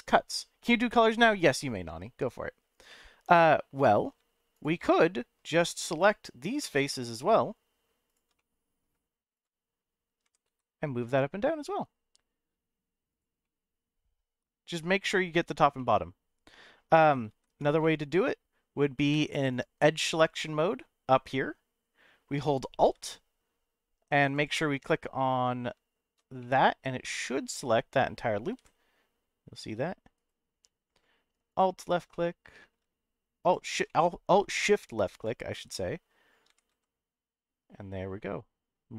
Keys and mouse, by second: 1.2 right click, 2.9 middle click, 3.8 middle click, 4.5 shift+click, 4.9 middle click, 6.8 middle click, 8.3 middle click, 9.4 shift+click, 10.2 g, 10.4 z, 13.1 click, 13.4 middle click, 15.8-16.8 middle drag, 17.3 ctrl+z, 17.8 middle click, 19.1 2, 22.4 middle click, 24.3 alt+click, 26.4 alt+middle click, 27.0-28.0 middle drag, 28.6 g, 30.1 right click, 31.5 alt+shift+click, 32.1 middle click, 33.4 alt+shift+click, 33.8 middle click, 35.1 alt+shift+click, 35.8 middle click, 36.5 g, 36.7 z.